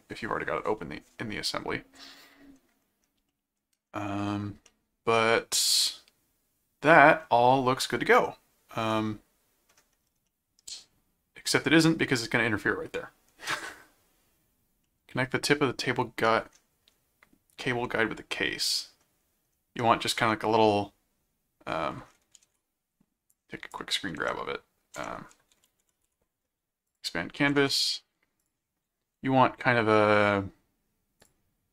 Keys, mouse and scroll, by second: 3.3 middle click, 4.7-7.2 middle drag, 8.1-9.7 middle drag, 10.3-11.8 middle drag, 14.8-16.4 middle drag, 17.8-19.0 middle drag, 19.8 middle click, 22.5 shift+super+s, 23.3 click, 24.2 alt+Tab, 25.0 alt+Tab, 25.4 ctrl+a, 26.0 ctrl+v, 26.9 click, 27.7 ctrl+shift+x, 28.4 click, 31.2 click.